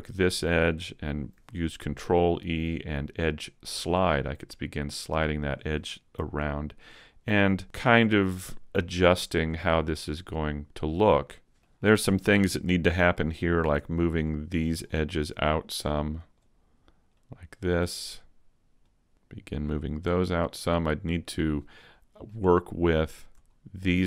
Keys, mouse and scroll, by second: 0.6 alt+right click, 1.8 ctrl+e, 5.4 click, 6.9 alt+right click, 7.6 ctrl+e, 10.8 middle click, 12.6 scroll down 2, 13.0 shift+right click, 13.5 shift+right click, 14.0 scroll down 1, 14.2 middle click, 15.8 click, 17.4 click, 18.8 click, 19.1 middle click, 19.1 shift+right click, 19.1 click, 20.3 scroll up 3, 20.7 middle click, 21.5-21.8 scroll up 1, 21.9 middle click, 23.0 right click, 23.5 middle click, 23.5 shift+right click.